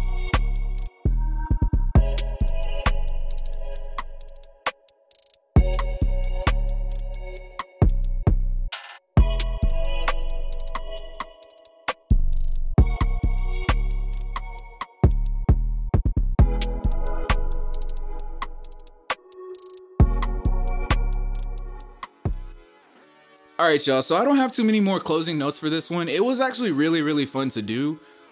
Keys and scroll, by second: 0.4 c, 2.3-6.9 typing, 9.6-12.0 typing, 14.4 t, 24.9-28.3 typing.